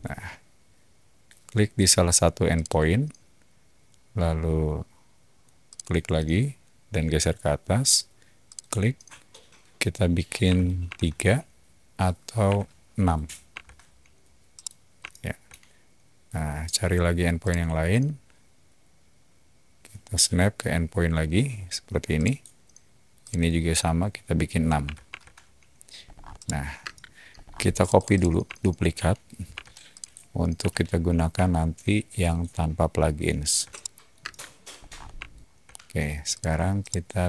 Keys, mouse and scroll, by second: 2.5 click, 5.6 click, 6.4-7.6 typing, 8.4 click, 10.2-10.9 typing, 12.4 6, 13.5 Return, 14.5-15.3 middle drag, 17.4 click, 17.5-18.3 typing, 22.1 click, 23.2 click, 24.8 6, 25.0 Return, 26.0 middle click, 26.0-26.3 scroll down 3, 26.3 middle click, 26.8 space, 27.3 scroll down 2, 27.7 click, 27.9 click, 28.1 click, 28.4-28.8 shift+middle drag, 29.5 m, 29.9 click, 31.3 shift+middle click, 32.2 shift+click, 32.6 shift+middle click, 33.7 middle click, 34.1 space, 34.7 scroll up 2, 35.2-35.8 shift+middle drag, 36.3 click, 36.8-37.2 middle drag.